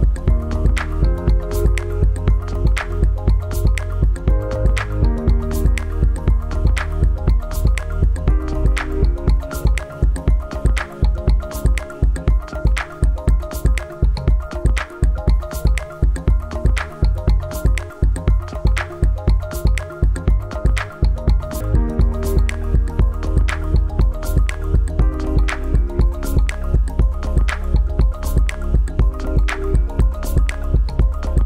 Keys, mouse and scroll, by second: 4.0 click, 15.5 click, 25.3 click.